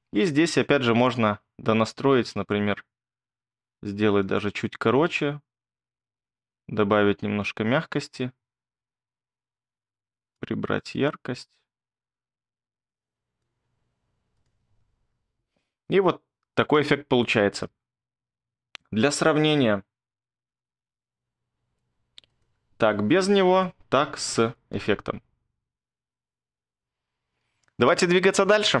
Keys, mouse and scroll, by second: 0.1-1.1 scroll, 14.6 space, 17.6 space, 20.9 z, 24.7 space, 27.4 space.